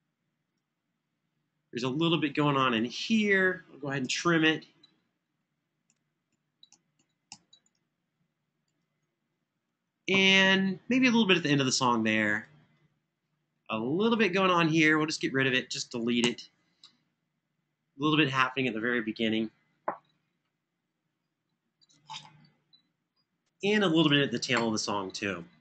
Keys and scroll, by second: 2.5 Home, 4.0 super+e, 5.1 Home, 5.6 Home, 6.1 Home, 6.4 Home, 7.0 Home, 13.3 Escape, 15.9 Delete.